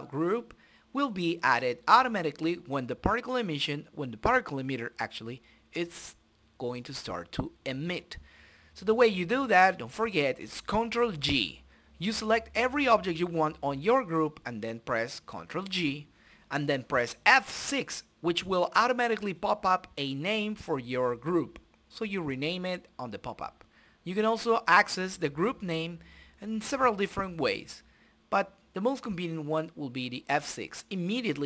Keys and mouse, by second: 0.6-2.8 drag, 4.2 click, 5.5-6.7 drag, 6.5 right click, 6.7 middle click, 6.9 right click, 7.1-8.3 middle drag, 8.3 click, 9.5-11.5 middle drag, 9.7 right click, 10.7 right click, 11.5 right click, 12.5-14.4 drag, 13.9 right click, 15.3 click, 16.0 middle click, 16.2 right click, 16.7 shift+z, 17.7 right click, 18.2 middle click, 18.8 right click, 19.7 shift+z, 20.2 right click, 21.2-23.6 drag, 23.1 right click, 23.9-25.1 drag, 25.3 click, 27.3 shift+F3, 27.8 n, 28.5-29.8 drag, 29.4 KP_Decimal, 29.8 middle click, 30.5 click, 31.0 KP_Decimal, 31.2 right click.